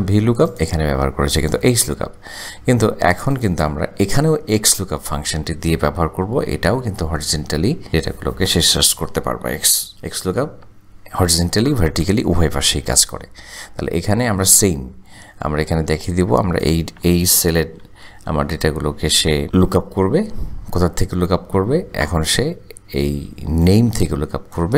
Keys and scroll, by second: 7.4 =, 9.9 typing, 10.5 Tab, 20.3 ,.